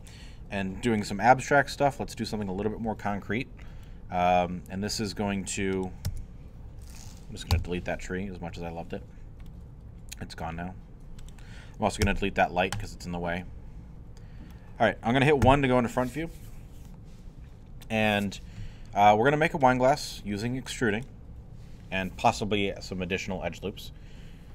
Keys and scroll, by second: 6.1 Tab, 7.5 Delete, 12.0 x, 15.4 i.